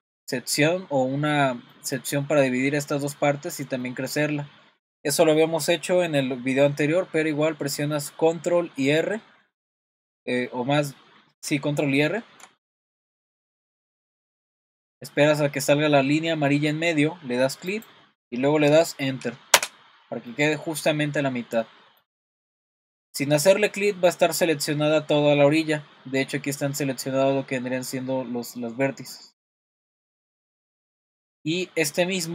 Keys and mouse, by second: 1.7 middle click, 3.8 middle click, 12.2 super+r, 20.3 middle click, 21.6 middle click, 23.1 middle click, 24.1 middle click, 25.2 middle click, 28.7 middle click, 29.5 shift+middle click, 30.2 middle click, 31.5 middle click.